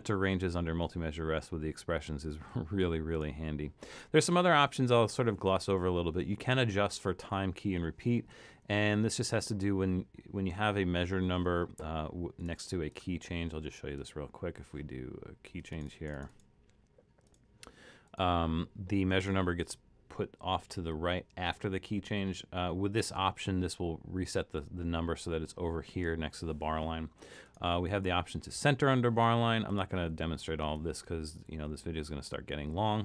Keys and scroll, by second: 30.1 super+z.